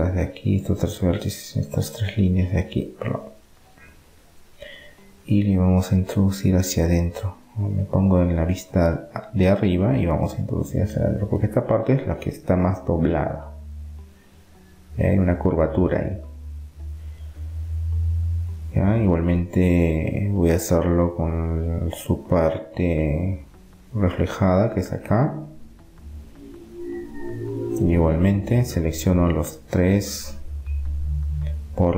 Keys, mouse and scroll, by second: 0.1 middle click, 1.0-6.3 right drag, 6.4 KP_7, 7.0-11.7 middle drag, 11.7 g, 17.1-22.4 middle drag, 20.0-20.4 scroll up 1, 22.7 middle click, 24.7-25.7 middle drag, 26.1-28.4 middle drag, 28.9 middle click, 29.4-30.4 middle drag, 31.5-31.9 right drag.